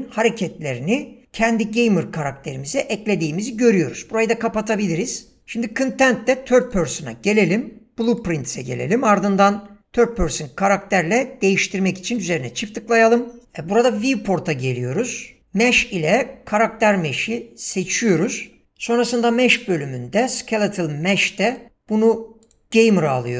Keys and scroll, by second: 5.4 ctrl+space.